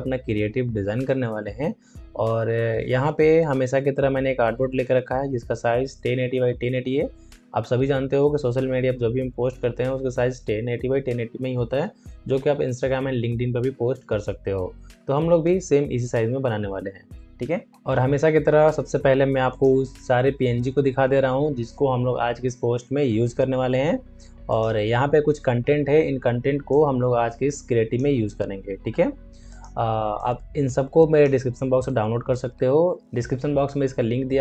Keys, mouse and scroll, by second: 19.4 click, 19.6 click, 24.4-33.0 drag.